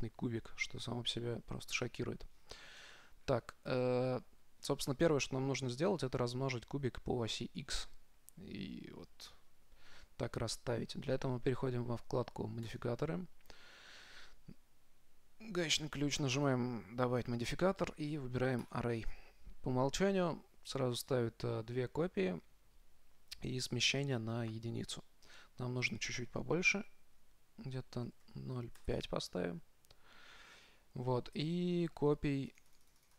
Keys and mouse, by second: 0.1-1.7 drag, 2.7-7.2 middle drag, 13.1-14.8 drag, 16.7-18.5 drag, 26.1-28.0 drag, 32.7-33.1 drag.